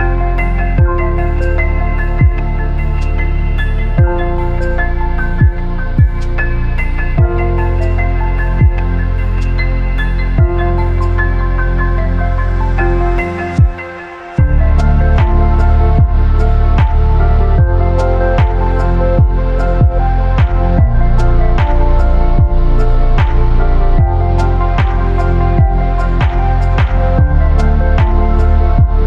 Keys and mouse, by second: 2.9 shift+click, 4.0 KP_Decimal, 5.1 click, 6.0-7.1 drag, 7.2 shift+drag, 8.6 shift+click, 10.7-11.5 drag, 11.8 shift+drag, 12.4 g, 14.4 shift+click, 14.6 click, 15.3 shift+click, 15.6 Tab, 16.3 Tab, 17.4 ctrl+r, 18.6 ctrl+r, 21.0 3, 22.4 i, 25.5 click, 26.4 x, 27.6 shift+drag.